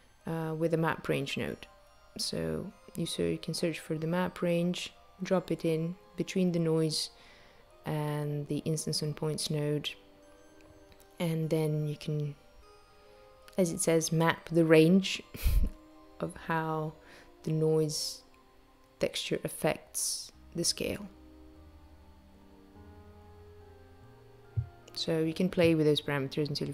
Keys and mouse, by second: 0.0 shift+a, 6.7 click, 12.0 shift+click, 16.5 shift+click, 21.7 shift+click, 24.6 space.